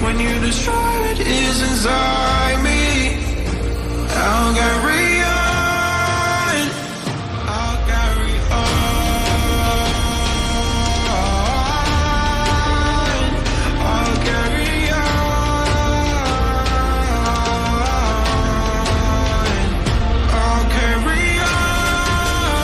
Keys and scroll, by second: 14.5 r.